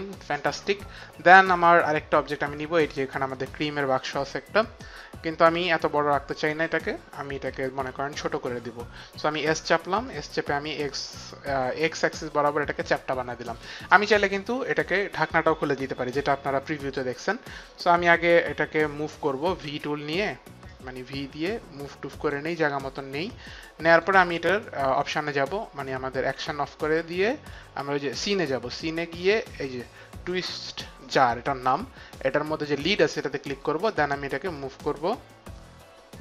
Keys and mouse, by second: 2.6 click, 7.5 t, 9.3 s, 10.0 click, 16.4 x, 19.6 v, 20.7 click, 23.8 click, 25.7 click, 27.4 click, 28.1 click, 32.6 click, 34.5 click.